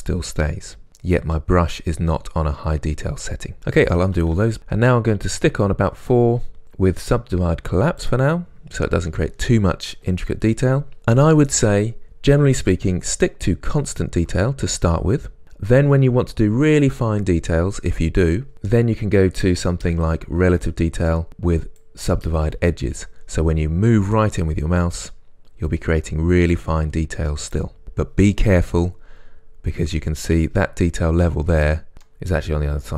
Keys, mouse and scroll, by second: 4.2 ctrl+z, 23.7 scroll up 1, 28.9 scroll down 1, 29.8-30.3 scroll up 1, 31.9 scroll down 1, 32.1-32.9 middle drag.